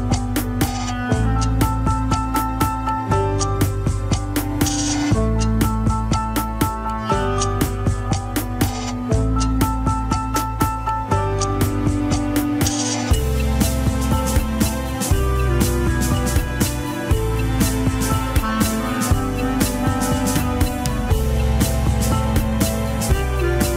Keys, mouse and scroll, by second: 0.4-1.0 scroll down 6, 1.0 ctrl+Tab, 1.1 scroll up 3, 1.3 shift+click, 1.7 ctrl+Tab, 2.2 scroll up 2, 2.4-3.8 shift+middle drag, 3.8 z, 4.9 alt+z, 5.2 shift+middle click, 5.5 scroll up 1, 5.7 alt+z, 6.5 ctrl+click, 7.8 scroll down 3, 8.0-10.3 middle drag, 10.3 ctrl+click, 10.4-13.0 middle drag, 13.3 scroll up 1, 14.0 click, 14.8-17.0 middle drag, 17.0 ctrl+z, 18.5 ctrl+z, 19.5 ctrl+click, 19.8-21.7 middle drag, 21.7 ctrl+click, 22.2-23.7 shift+middle drag, 23.7 ctrl+click.